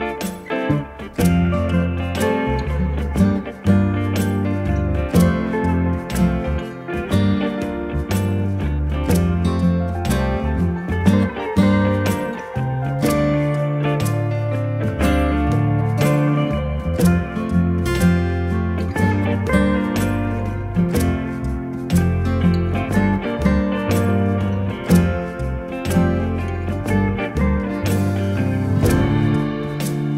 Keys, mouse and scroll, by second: 4.6 click, 9.6 ctrl+t, 11.3 click, 21.4 Return, 22.6 click.